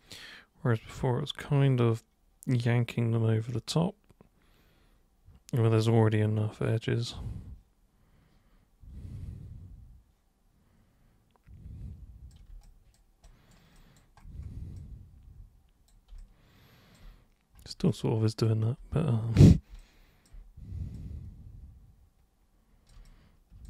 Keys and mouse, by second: 12.7 alt+super+click, 13.3 alt+super+right click, 13.8 alt+click, 13.9 alt+right click, 14.7-15.9 drag, 16.2 alt+click, 17.9 alt+click, 19.7 b, 19.8 click, 20.9-22.9 super+drag, 23.0 alt+super+click.